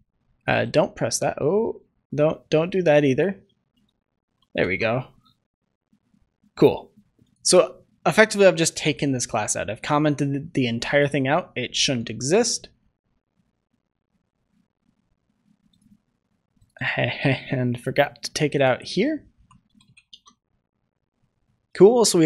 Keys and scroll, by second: 0.6 ctrl+c, 2.1 ctrl+z, 3.7 ctrl+c, 4.5 ctrl+s, 11.0 ctrl+shift+s, 20.2 ctrl+s.